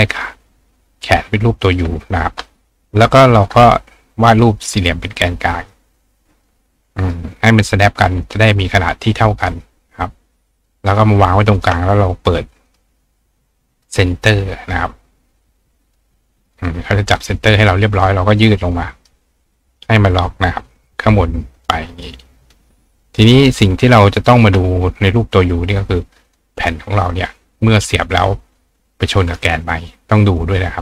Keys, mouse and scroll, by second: 0.1 click, 1.0 ctrl+click, 2.1 drag, 4.3 click, 5.7-7.1 drag, 8.2 click, 9.8-11.0 drag, 11.6 shift+click, 12.7 click, 13.7 click, 14.6 click, 15.9 click, 16.5 click, 17.1 click, 18.4 click, 20.1-21.7 drag, 22.0 click, 22.5 click, 23.4 click, 24.2 click, 26.3 click, 26.9-28.2 drag, 30.4-30.8 drag.